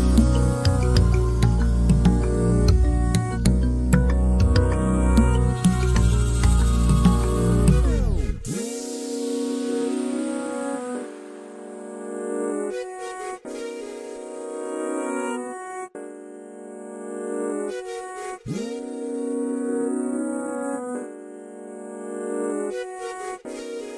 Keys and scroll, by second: 8.4 b, 22.4 typing.